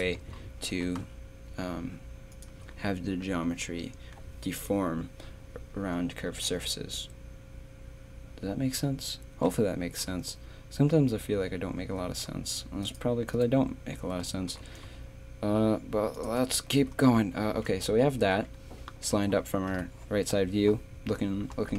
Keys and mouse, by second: 0.7 g, 3.2 a, 12.1 z, 12.8-14.5 drag, 14.5 g, 16.7 z, 17.8 a, 19.7 KP_3.